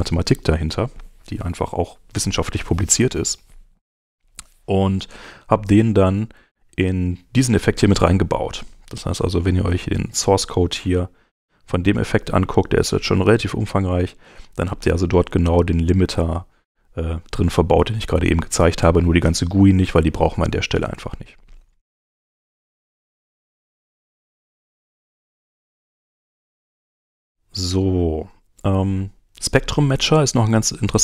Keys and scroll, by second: 24.1 super+Tab.